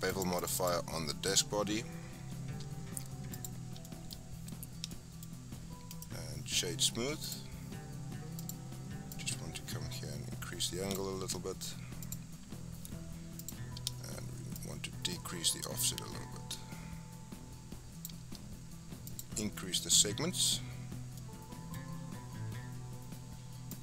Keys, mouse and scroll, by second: 0.1 click, 0.4 click, 3.4 drag, 3.8 shift+middle drag, 4.1-4.9 scroll up 5, 4.9-5.3 shift+middle drag, 5.3 scroll up 2, 5.9-8.4 right drag, 8.4 click, 9.1-11.4 drag, 11.4-12.0 scroll down 1, 12.0 click, 13.4 click, 14.5-17.6 shift+drag, 19.1-21.2 drag, 21.2-21.7 middle drag, 21.7-22.6 scroll up 3, 23.7 click.